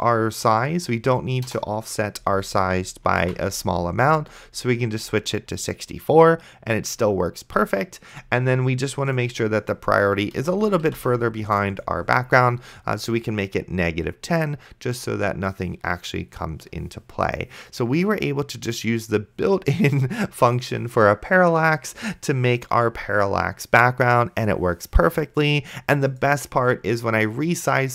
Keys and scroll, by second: 1.7 BackSpace, 3.5 ctrl+s, 11.1 ctrl+s.